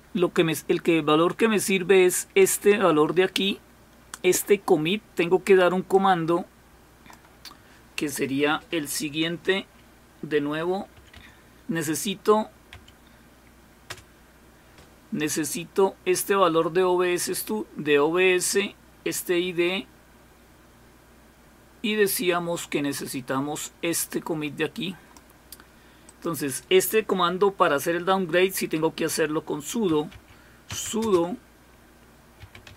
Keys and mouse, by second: 5.9-7.2 drag, 8.0 click, 13.9 Return, 22.6-25.9 drag, 26.1 click, 26.7 click, 30.8 typing, 32.2-32.7 typing.